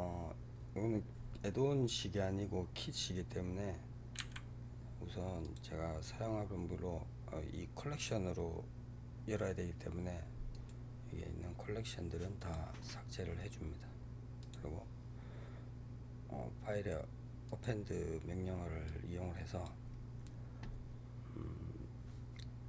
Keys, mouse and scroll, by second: 4.0 Delete, 5.3 click, 10.4-14.3 right drag, 14.3-17.3 drag.